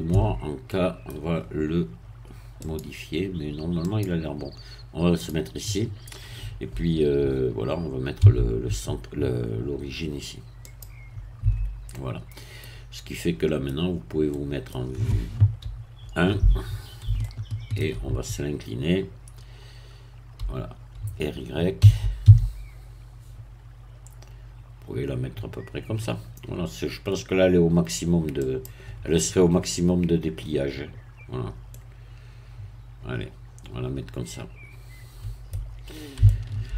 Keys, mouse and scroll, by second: 0.1 Tab, 0.7 middle click, 2.6 click, 3.9 click, 5.2-8.2 drag, 8.2 q, 10.6 click, 11.4 Tab, 11.9 middle click, 12.6-13.2 scroll down 1, 13.2 middle click, 13.7-14.3 scroll down 2, 14.3 middle click, 15.6 1, 17.2-18.4 shift+middle drag, 21.8 r, 22.2 y, 28.4-31.7 drag, 31.7-35.7 middle drag, 36.2-36.7 shift+middle drag.